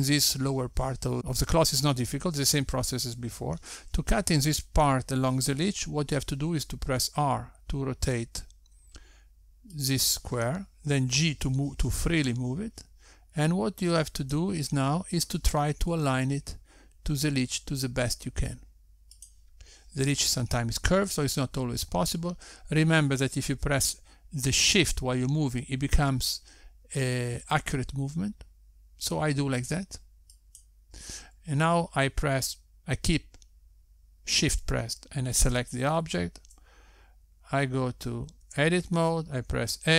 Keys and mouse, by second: 8.7 r, 12.5 g, 17.7 r, 21.8 g, 37.4 shift+click.